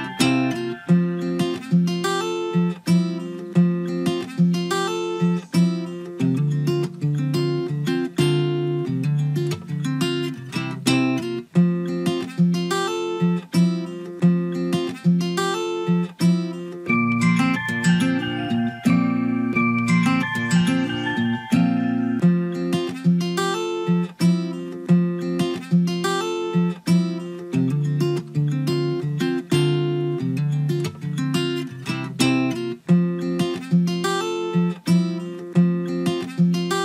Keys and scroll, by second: 34.6 ctrl+v.